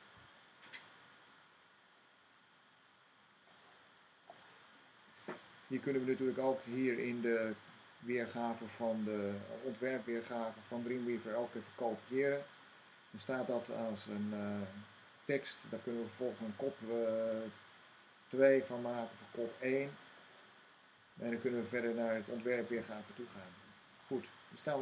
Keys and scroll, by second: 0.0-0.5 typing, 5.3 c, 11.9 v.